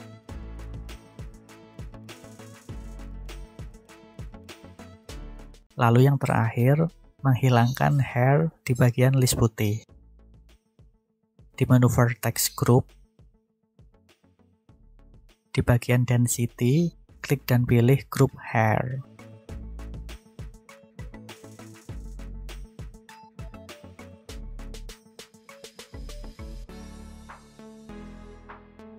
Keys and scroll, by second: 1.7 ., 2.0 0, 3.4 Return.